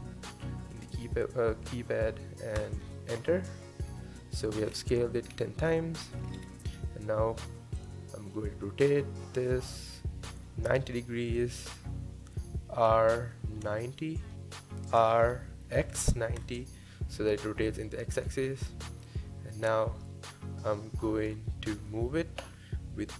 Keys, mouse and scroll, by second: 3.9-4.7 middle drag, 4.7 scroll down 5, 4.9-5.3 scroll up 1, 5.3-5.7 scroll down 3, 5.7-6.2 middle drag, 6.2-7.8 scroll up 4, 7.8 click, 8.3-11.3 middle drag, 12.9 r, 15.2 r, 18.5-21.3 middle drag, 21.3 KP_7.